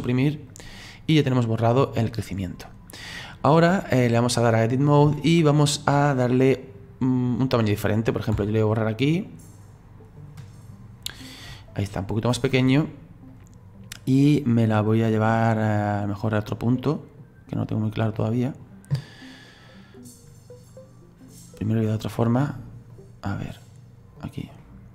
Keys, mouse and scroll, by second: 1.2-4.2 drag, 4.4 click, 5.3-7.4 middle drag, 7.4 right click, 8.3 Delete, 11.5-13.3 middle drag, 13.3 right click, 14.4 right click, 18.1-19.6 middle drag, 19.6 right click, 23.6 right click, 24.6-24.9 middle drag.